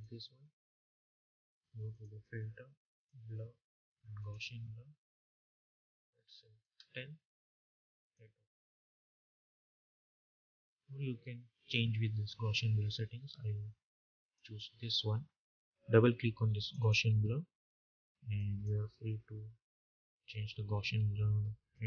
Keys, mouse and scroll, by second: 14.0 click, 16.4 click, 21.6 click.